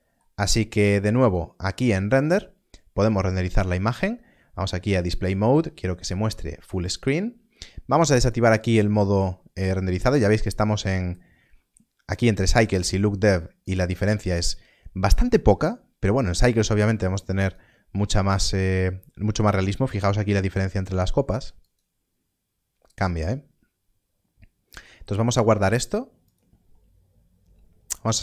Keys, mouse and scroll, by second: 1.2 click, 10.3 click, 14.5 click, 17.3 click, 21.5 click, 24.6 click.